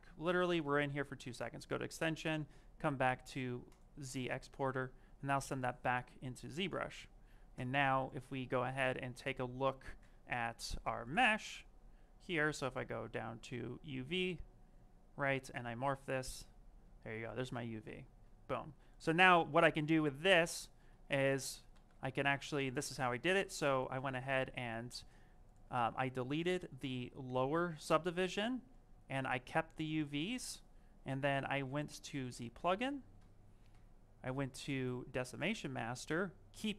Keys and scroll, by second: 22.0 d, 23.1 shift+f.